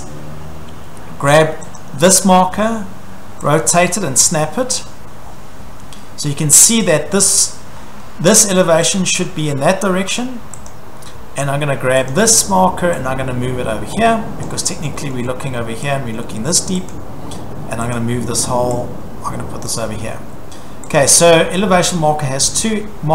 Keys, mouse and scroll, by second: 1.8 click, 2.5 scroll, 4.7 click, 5.3-5.8 scroll, 7.8 scroll, 10.2 click, 10.7 click, 10.9 Escape, 11.2 scroll down 3, 11.4 scroll, 14.4 click, 15.1 scroll, 16.5 click, 16.9 click, 17.9 click, 19.7 click, 19.9 scroll, 20.2 Escape, 20.9 click, 22.0-22.4 scroll, 22.4 Escape.